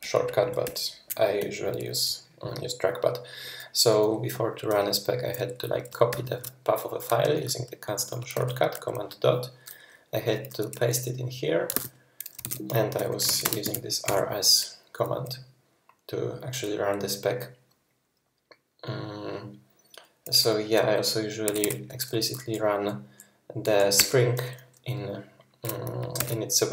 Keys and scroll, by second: 0.2 ctrl+Right, 0.7 ctrl+Left, 0.9 ctrl+Right, 0.9 ctrl+Left, 6.1 super+., 7.2 super+., 8.3 super+., 9.4 super+., 11.8 super+v, 12.5 ctrl+c, 13.0-13.9 typing, 14.1 Return, 21.5 typing, 24.0 Return, 26.2 super+d.